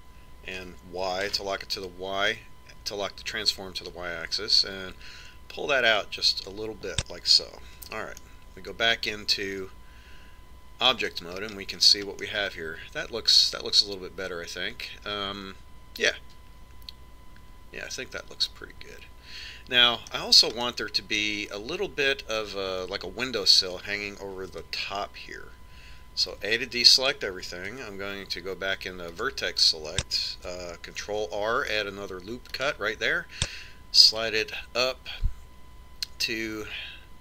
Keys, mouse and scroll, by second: 8.4 Tab, 8.9-10.8 middle drag, 12.0-12.9 scroll up 1, 12.9-14.6 middle drag, 21.4-23.3 middle drag, 25.3 Tab, 27.1 a, 28.5 ctrl+Tab, 31.8 ctrl+r.